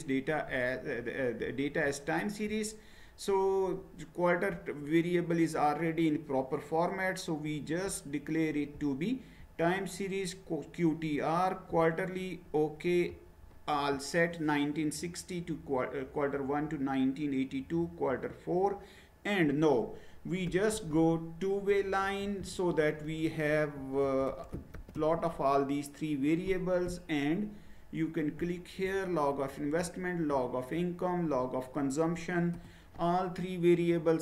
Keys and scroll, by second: 20.2-25.2 typing, 32.5 Return.